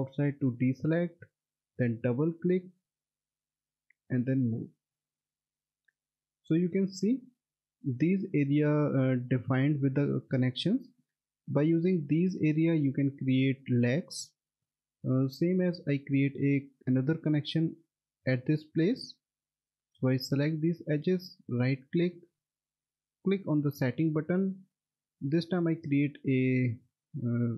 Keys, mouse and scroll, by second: 2.3 double click, 3.6 click, 7.2 middle click, 7.5-9.6 scroll up 1, 9.6 middle click, 10.2 alt+w, 10.5 middle click, 14.3 scroll down 1, 14.9 middle click, 19.2 click, 21.2 right click, 23.3 click.